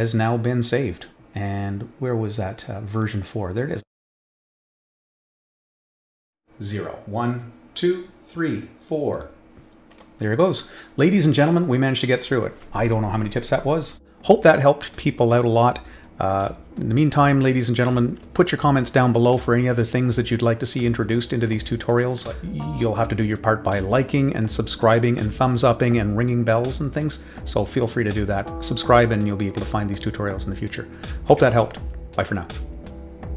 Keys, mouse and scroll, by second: 2.9 click, 4.7 click, 4.9 click, 9.1 click, 9.9 click, 11.4 click.